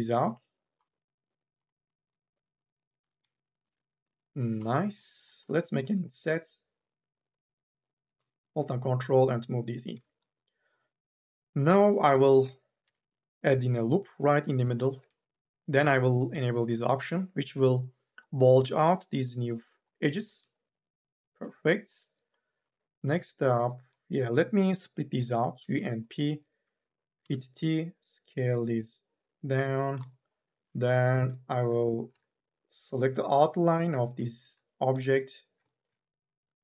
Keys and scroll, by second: 2.2 t, 2.8 e, 5.6 m, 6.0 w, 12.6 k, 12.9 l, 22.3 3, 22.5 4, 22.9 3, 25.0 u, 25.3 p, 27.0 t, 31.1 2, 31.9 u, 32.2 l.